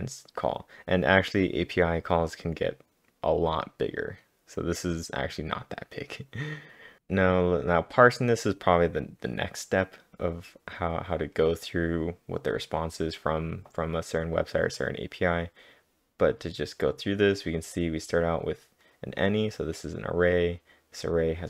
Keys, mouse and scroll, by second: 1.4-2.1 typing, 6.8-7.6 typing, 7.0 scroll down 1, 17.5-18.3 typing, 17.7 scroll down 1, 17.8 click.